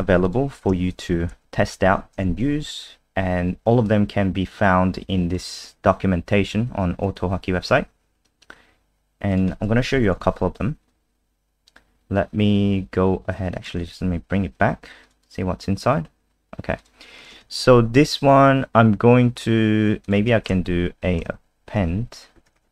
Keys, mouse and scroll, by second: 0.2 click, 0.9 shift+click, 1.5 shift+Up, 2.1 ctrl+v, 3.9 click, 9.9 End, 10.1 Home, 10.5 Delete, 13.5 click, 13.7 ctrl+z, 15.0 click, 15.2 click, 16.8 click, 17.2 click, 17.4 ctrl+s, 20.0 click, 21.2 BackSpace, 21.7 a, 22.6 ctrl+s.